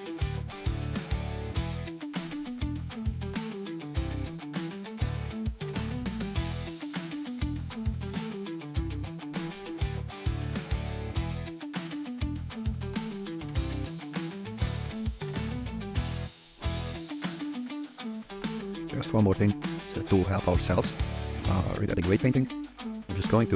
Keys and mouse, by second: 0.0-7.3 typing, 0.2 click, 0.8 click, 1.5 click, 1.9 click, 2.3 middle click, 2.9 click, 3.8 click, 3.9 drag, 4.6 click, 5.3 shift+middle click, 5.6 click, 8.4-11.0 typing, 9.6 drag, 9.8 middle click, 12.3 click, 12.7-15.5 typing, 13.3 click, 14.0 click, 14.2 middle click, 14.4 click, 15.3 click, 15.3 click, 15.7 middle click, 18.6 click, 23.1 g, 23.4 z.